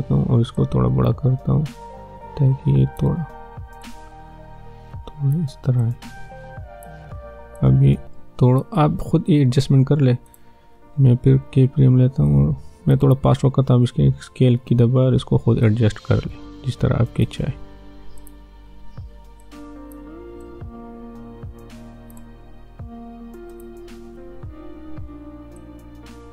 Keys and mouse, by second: 0.5-10.2 drag, 10.7 ctrl+d, 12.2-14.7 drag, 14.7 s, 15.6-18.2 drag, 18.7 ctrl+d, 19.4-23.5 drag, 24.0 s, 25.6-26.3 drag.